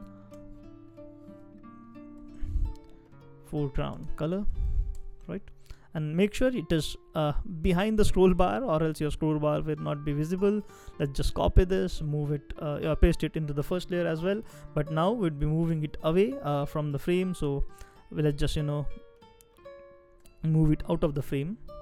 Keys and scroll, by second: 0.3 shift+b, 2.2-5.3 typing, 10.8 super+c, 12.7 super+v, 14.9 shift+Down, 15.4 shift+Down, 15.4 shift+Down, 17.4 space, 17.9 space, 17.9 space.